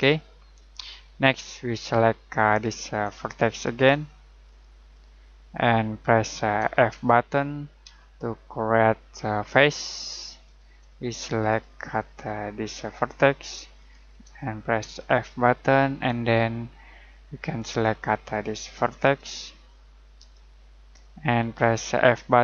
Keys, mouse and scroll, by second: 0.3 middle click, 2.4 right click, 3.5 shift+right click, 4.4 shift+right click, 6.2 shift+right click, 7.8 f, 8.4 middle click, 10.4 right click, 11.4 right click, 12.6 shift+right click, 13.8 shift+right click, 14.8 f, 15.5 middle click, 17.6 right click, 19.0 shift+right click, 20.2 shift+right click.